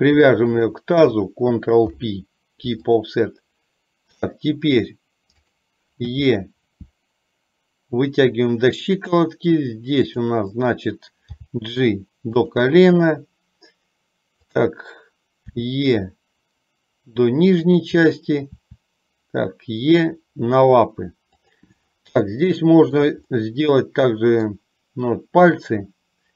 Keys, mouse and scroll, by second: 0.6 shift+click, 2.0 ctrl+p, 6.3 e, 11.5 g, 14.6 click, 15.7 e, 22.5 shift+middle click, 23.6-24.8 middle drag, 25.8-26.3 middle drag.